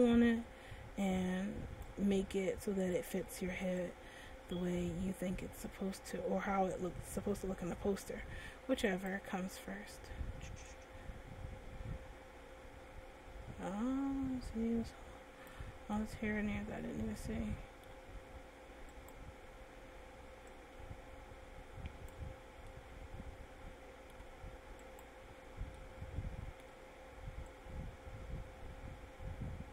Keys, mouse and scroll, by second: 2.7 middle click, 4.5 click, 9.7 right click, 11.4 click, 16.3 middle click, 19.8 right click, 21.1 click, 22.9 middle click, 25.6 right click, 26.2 middle click, 28.2 click.